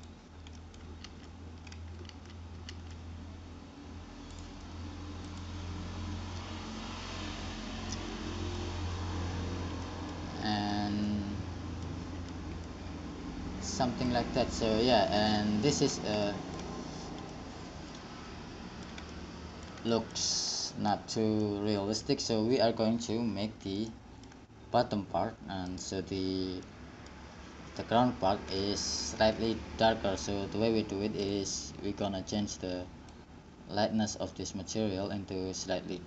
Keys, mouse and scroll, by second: 0.8 middle click, 1.3 alt+z, 2.3 alt+z, 2.9 alt+z, 8.3-9.4 middle drag, 10.2-11.3 middle drag, 12.7 a, 14.0 middle click, 16.4 middle click, 17.6-26.0 middle drag, 26.0-28.5 right drag, 28.5-31.5 middle drag, 31.5-33.9 drag.